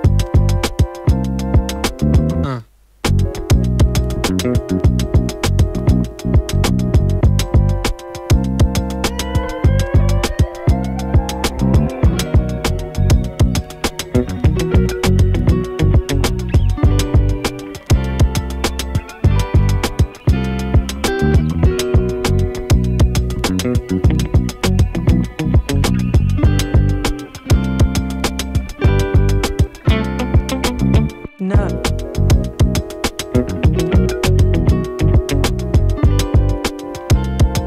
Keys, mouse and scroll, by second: 2.0 space, 3.0 click, 4.5 space, 6.4 space, 7.5-9.0 drag, 9.0 space, 10.7 v, 11.1 click, 13.0-13.6 typing, 14.2-24.5 drag, 24.5 F9, 25.6-36.5 drag, 36.5 space, 37.5-37.6 drag.